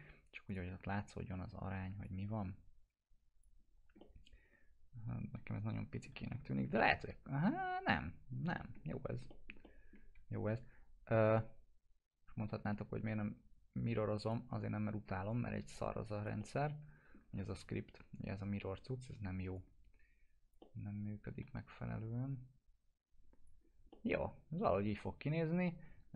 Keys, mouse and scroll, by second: 0.5 click, 0.9 w, 2.0-3.6 drag, 3.6 scroll up 1, 4.0-6.2 alt+middle drag, 6.4 scroll up 1, 6.7-8.3 alt+middle drag, 9.0 scroll up 1, 9.3 middle click, 10.1 e, 11.4-14.5 drag, 14.5 w, 15.3-17.3 click, 16.4-19.5 alt+middle drag, 19.5-21.5 click, 20.6-22.3 alt+middle drag, 22.3-23.5 drag, 23.6 scroll down 1, 23.9-26.1 alt+middle drag.